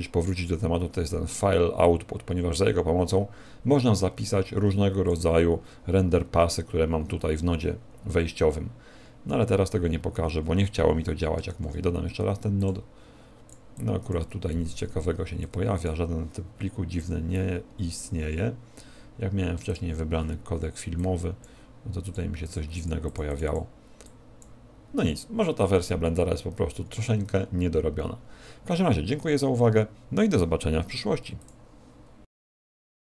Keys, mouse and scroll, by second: 19.7 click.